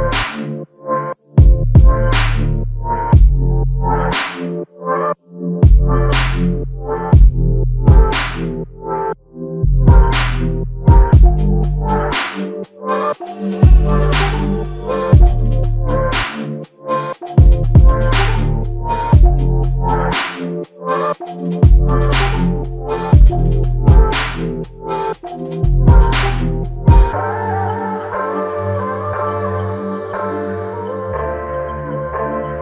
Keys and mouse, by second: 0.5 shift+click, 0.7 shift+double click, 1.5 alt+click, 10.3 double click, 17.4 double click, 17.6 shift+click, 23.4 alt+click, 28.2-29.5 typing.